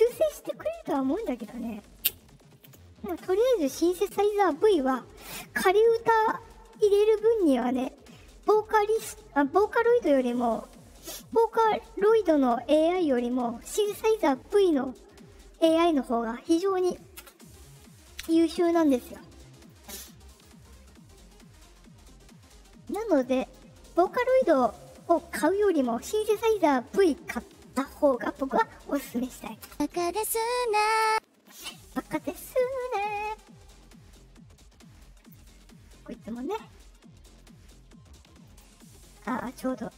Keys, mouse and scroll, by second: 17.1 space, 18.2 space, 20.2 click, 23.0 click, 23.9 click, 29.6 space, 31.0 space, 31.9-32.3 drag, 38.4 click, 38.9 click.